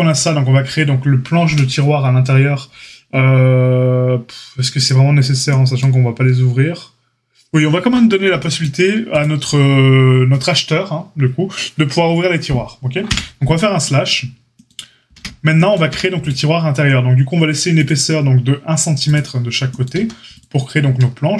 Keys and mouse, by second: 13.0 KP_Divide, 15.1 Tab, 15.8 a, 17.8-19.1 drag, 19.1-21.3 middle drag, 19.9 a.